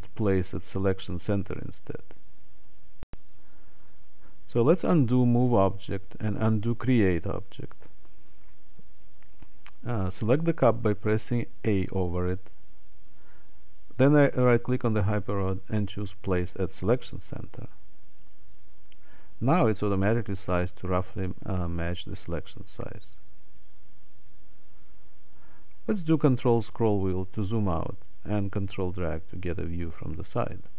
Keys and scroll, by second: 10.4 a.